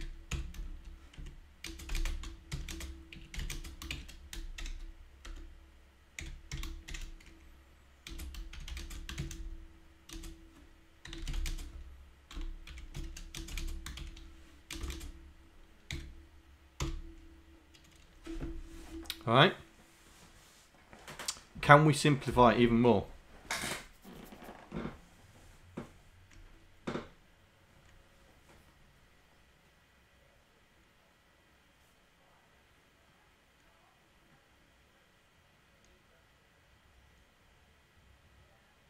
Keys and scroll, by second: 0.4 2, 1.2 Right, 1.8-6.9 typing, 8.8-16.8 typing, 14.9 KP_Add.